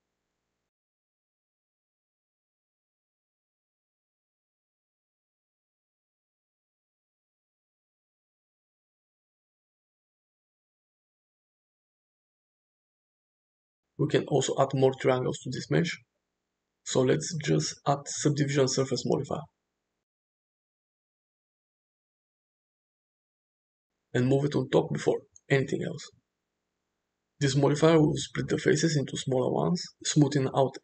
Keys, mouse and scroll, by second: 0.1 click, 1.3-2.4 drag, 4.0 drag, 4.6-5.8 drag, 5.8-7.1 middle drag, 7.6-8.1 middle drag, 8.6 shift+middle drag, 9.0-9.4 middle drag, 10.1-10.7 middle drag, 11.3 shift+middle click, 11.6-12.1 middle drag, 13.5 click, 15.8-21.6 drag, 24.0-26.5 drag.